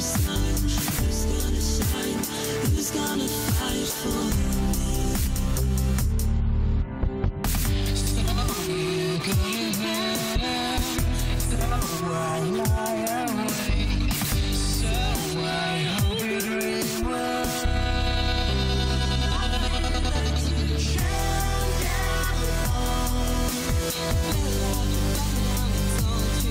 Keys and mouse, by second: 12.3 n, 24.0 click, 25.0-26.5 drag.